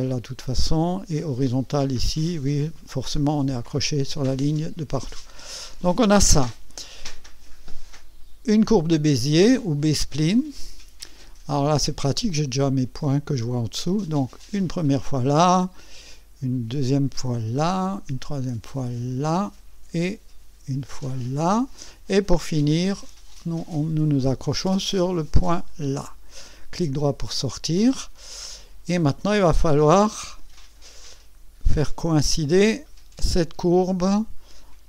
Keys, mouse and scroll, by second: 1.5 right click, 2.3 scroll up 1, 4.5-4.8 scroll down 1, 5.1 right click, 6.2-6.5 scroll up 1, 6.7 right click, 10.3 click, 14.8 click, 17.4 click, 19.2 click, 21.3 click, 25.7 click, 27.0 right click, 28.2 scroll up 1, 28.6 scroll down 1, 29.4 right click, 30.9 right click, 32.6-34.6 drag.